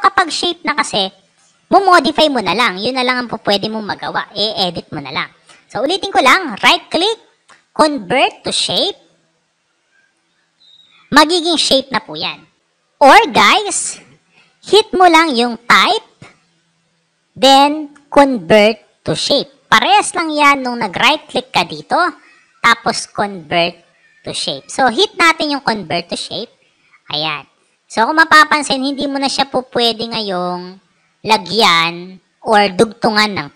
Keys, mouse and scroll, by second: 0.2 click, 6.2 right click, 8.3 click, 15.5 click, 20.6 click, 20.9 right click, 25.5 click.